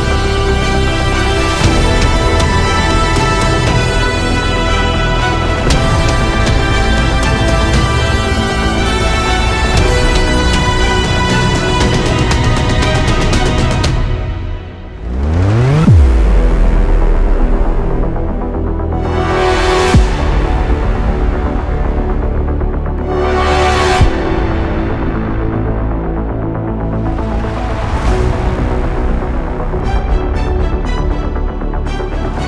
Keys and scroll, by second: 10.2 ctrl+alt+z, 13.3-14.3 typing, 21.7-26.7 typing, 31.7 space.